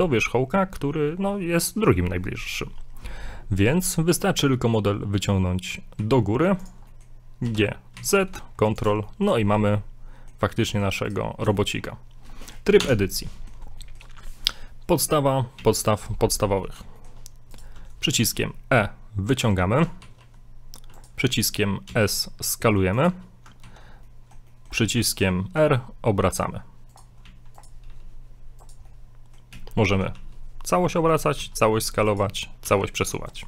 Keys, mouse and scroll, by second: 0.6 scroll down 2, 3.6 g, 6.9 middle click, 7.4 g, 9.0 shift+middle click, 9.5 middle click, 10.7 middle click, 11.1 right click, 11.6 shift+middle click, 12.2-12.8 scroll up 1, 12.8 Tab, 13.3 scroll up 1, 13.4 middle click, 13.8 shift+middle click, 15.6 a, 16.3-16.6 scroll down 2, 16.6 middle click, 17.0 shift+middle click, 17.6 right click, 18.2 e, 20.0 ctrl+z, 21.0 right click, 21.9 s, 23.6 ctrl+z, 24.0 scroll up 1, 24.1 middle click, 24.5 shift+middle click, 25.2 ctrl+right click, 25.5 ctrl+right click, 25.6 r, 27.2 a, 27.6 right click, 27.9 r, 28.9 middle click, 29.5 a, 29.8 a, 30.1 a, 30.2 r, 31.4 s, 32.6 g.